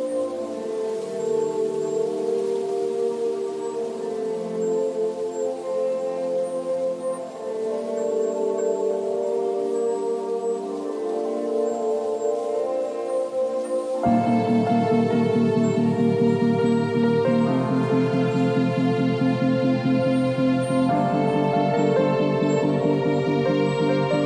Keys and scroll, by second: 0.2 ctrl+shift+v, 0.5 ctrl+t, 7.5 space, 13.2 space, 13.4 ctrl+a, 13.7 ctrl+c, 14.0 ctrl+w, 14.3 ctrl+v, 14.7 ctrl+t, 24.1 space.